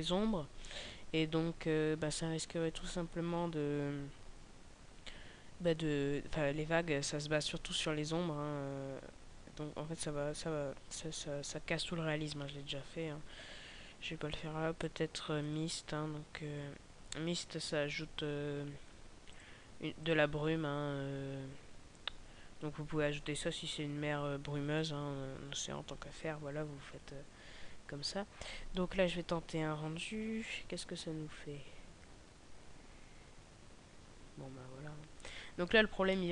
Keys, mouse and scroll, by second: 34.9 Escape, 36.0 middle click, 36.0-36.3 scroll down 1.